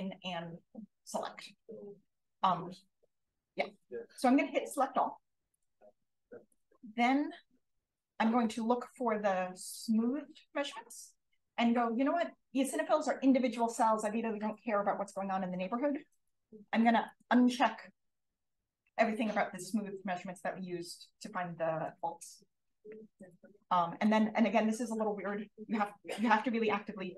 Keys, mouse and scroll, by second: 5.4 click, 6.4 click, 7.3-8.8 typing, 17.0 click, 23.4 click, 26.9 BackSpace.